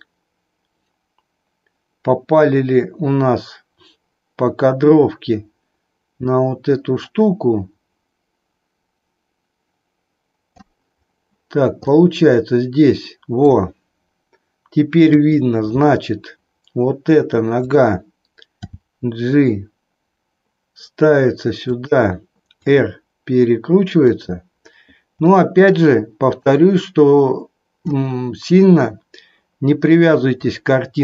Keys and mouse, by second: 11.9-13.7 middle drag, 15.0 KP_3, 17.7 click, 18.5 g, 21.7 click, 22.5 r, 26.4-28.0 drag, 30.4-31.0 drag.